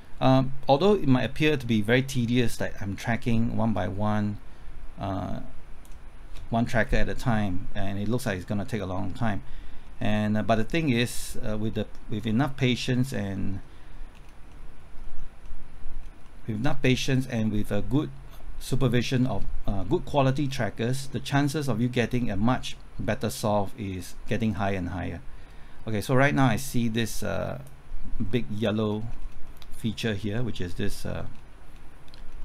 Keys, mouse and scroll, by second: 6.6-7.3 scroll up 1, 7.3-8.4 middle drag, 9.8 scroll down 1, 11.1-12.9 middle drag, 12.9-13.3 scroll up 1, 13.3 middle click, 14.1-14.4 scroll down 1, 14.5 middle click, 14.9-15.4 scroll up 1, 15.4 middle click, 15.9-16.2 scroll up 1, 16.2-19.1 middle drag, 19.1-19.8 scroll down 1, 19.8 middle click, 20.3-21.1 scroll down 1, 21.1 middle click, 27.0 click, 28.2 middle click, 28.7-29.4 scroll up 1, 29.4 middle click, 30.0-31.9 scroll down 1, 32.1-32.4 scroll up 1.